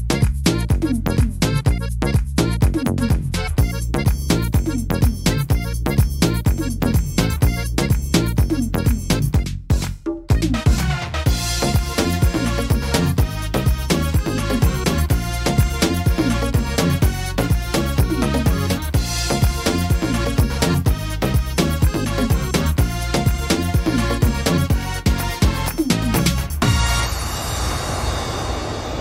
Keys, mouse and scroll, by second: 0.8 e, 2.8 middle click, 3.6 shift+middle click, 4.0 scroll up 2, 4.5 middle click, 5.2 right click, 5.8 e, 7.2 click, 8.4 e, 9.9 click, 11.5 click, 12.5 middle click, 13.1 middle click, 13.8 right click, 15.6 e, 17.2 click, 19.2 click, 20.4 right click, 21.2 e, 22.8 click, 24.7 click, 26.4 right click, 26.9 e, 28.1 click.